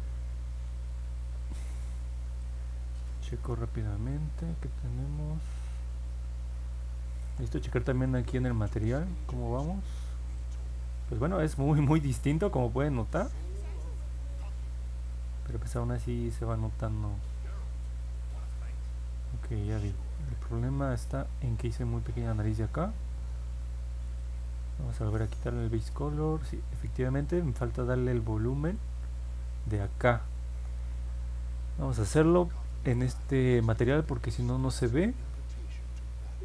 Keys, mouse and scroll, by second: 2.4-7.2 alt+drag, 8.0 click, 8.7 click, 10.3-19.6 alt+drag, 19.8 middle click, 20.2 middle click, 20.5 middle click, 24.0 click, 25.4 click, 27.2 click, 28.6 click.